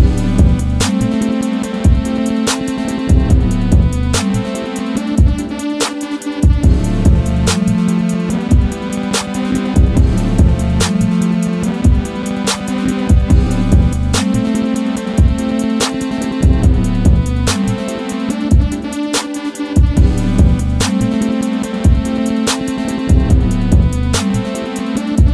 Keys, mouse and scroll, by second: 0.5-8.9 drag, 8.9-10.8 drag, 12.6-13.4 typing, 13.3 click, 13.8 scroll up 1, 14.9 click, 16.7 typing, 17.9-25.3 drag, 17.9 typing.